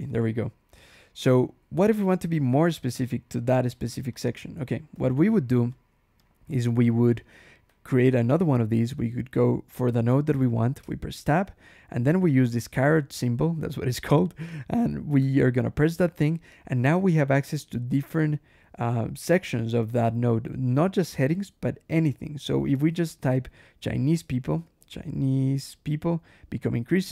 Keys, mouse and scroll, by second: 1.1 Escape, 1.3 k, 4.0 click, 4.8 ctrl+e, 5.6 click, 6.1 click, 6.3 Escape, 6.7-9.7 typing, 10.7 Tab, 15.7 shift+6, 23.8-25.7 typing.